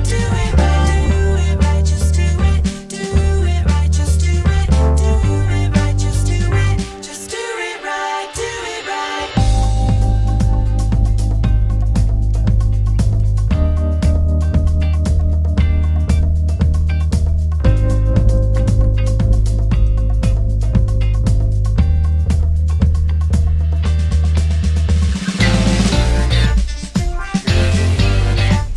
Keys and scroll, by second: 21.6 Escape, 22.0 d, 22.5 3, 22.9 BackSpace, 25.2 3, 25.5 Return.